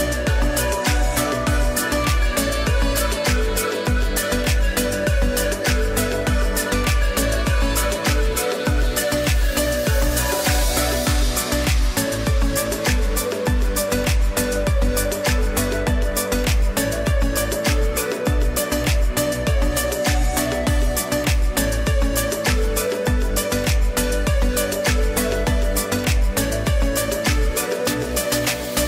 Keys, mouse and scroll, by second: 8.8 ctrl+0, 9.2 ctrl+e, 10.4 click, 13.6 space, 13.8 click, 14.8 space, 14.9 click, 15.5 space, 16.8 click, 19.9 space, 20.1 click, 20.6 space, 21.0 click, 21.1 space, 21.4 click, 21.9 space, 22.7 click, 23.1 space, 24.1 click, 24.6 space, 24.8 click, 25.3 space, 26.6 space, 27.8 ctrl+shift+a.